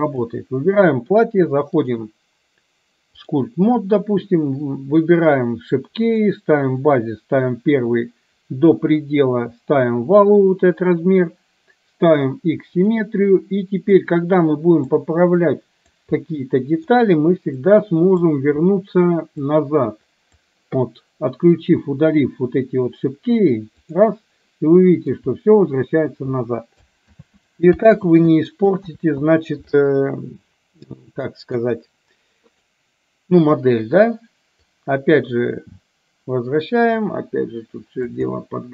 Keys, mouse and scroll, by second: 0.2 click, 2.0-3.5 drag, 5.4 click, 6.2 click, 8.0 click, 12.9 click, 14.0-15.0 drag, 15.4 click, 16.3 middle click, 17.7 click, 19.4-20.4 drag, 23.9 click, 24.8 middle click, 27.2 ctrl+z, 28.2 ctrl+z, 29.0 ctrl+z, 31.4 middle click, 32.7 click, 34.9 click, 37.0-38.2 drag, 38.4 middle click.